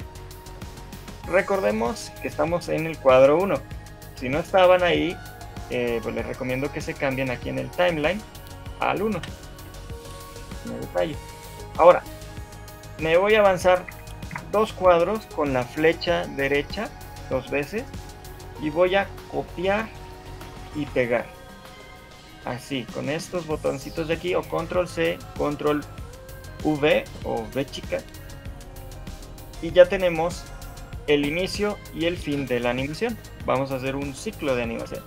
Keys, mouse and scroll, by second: 0.4-0.8 scroll up 3, 1.2 shift+middle click, 10.0 click, 10.6 shift+middle click, 11.9 click, 12.5 shift+middle click, 14.1 Right, 14.5 Right, 20.9 click, 28.7 shift+middle click, 30.9 right click.